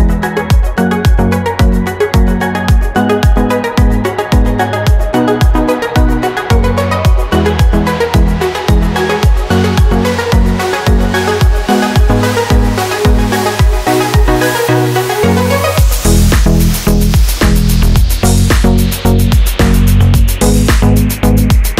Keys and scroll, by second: 10.4 ctrl+d, 11.7 super+d.